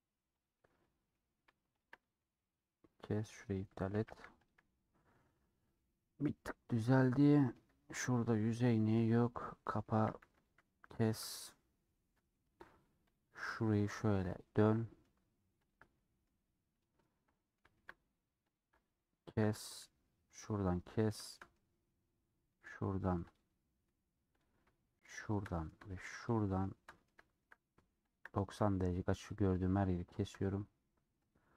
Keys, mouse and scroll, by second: 0.5 click, 0.6-1.8 middle drag, 1.8 shift+click, 1.9 middle click, 3.4 click, 4.0 a, 5.1-5.7 scroll down 8, 5.7-8.3 middle drag, 8.3 click, 9.3 middle click, 10.0 a, 10.7-12.4 middle drag, 12.4 2, 13.2 click, 14.7 middle click, 15.6 ctrl+click, 15.9 middle click, 16.8 ctrl+click, 17.3-18.6 middle drag, 18.6 ctrl+click, 19.3 a, 20.8-22.5 middle drag, 22.5 click, 23.5 scroll up 2, 24.5 click, 25.4 middle click, 26.4 shift+click, 26.4-28.2 shift+middle drag, 28.2 shift+click, 28.3-29.4 middle drag, 29.4 shift+click, 30.3 shift+click, 31.4 click.